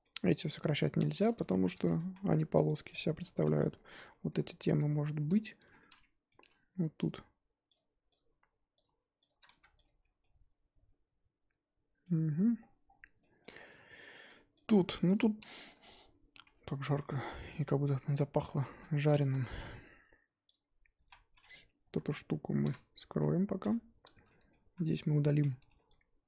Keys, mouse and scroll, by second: 1.4 ctrl+z, 2.0 ctrl+z, 2.7 click, 2.8 Tab, 3.4 Tab, 3.6 click, 4.2 l, 4.7 l, 5.5 shift+h, 5.8-6.4 middle drag, 6.4 3, 7.0 click, 7.7 shift+click, 8.1 shift+click, 9.2 shift+click, 9.8 x, 9.9 Tab, 10.2-12.5 middle drag, 12.5-13.1 scroll down 7, 13.1-13.7 middle drag, 13.7 click, 13.9-14.3 shift+middle drag, 14.3 click, 14.6 click, 14.7-15.1 scroll up 1, 15.1 click, 15.5 shift+middle drag, 15.7-16.4 scroll up 4, 16.4 Tab, 16.9 z, 17.4 middle click, 17.7-18.3 scroll up 1, 18.3 scroll down 1, 18.4-20.5 middle drag, 20.5 click, 21.0 z, 22.6 l, 23.6 h, 24.2-24.7 middle drag, 24.7 z.